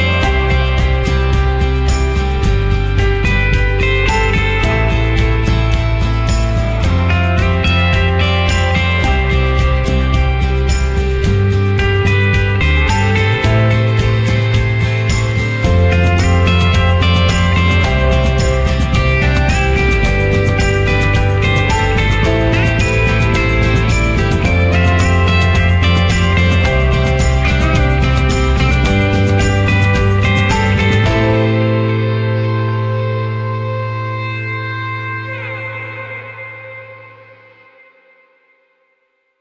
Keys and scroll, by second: 21.9 ctrl+z.